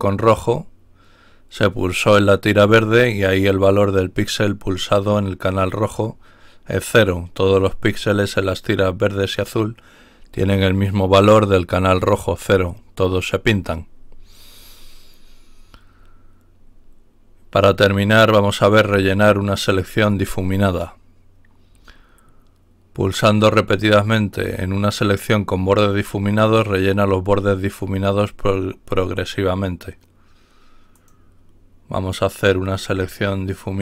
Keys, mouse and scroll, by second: 13.5-14.6 scroll down 2, 14.6-15.0 scroll down 1, 15.2-15.8 scroll down 1, 16.0-17.2 scroll down 2, 17.8-18.3 scroll down 1, 18.9-19.6 scroll down 1, 30.9 click.